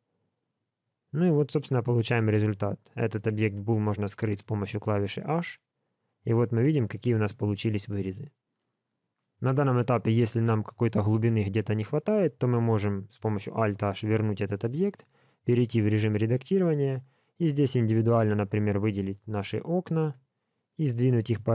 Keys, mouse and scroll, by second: 1.1 click, 2.1 click, 4.5 h, 5.3 middle click, 7.2 scroll up 1, 7.9 shift+middle click, 8.3 middle click, 9.6 middle click, 11.0-12.0 scroll down 1, 12.0-12.6 scroll up 1, 13.6 alt+h, 14.2 middle click, 15.1 Tab, 15.9 shift+middle click, 16.4 alt+a, 17.5-18.0 scroll up 2, 18.0 shift+middle click, 19.4 l, 20.0 l, 20.7 g.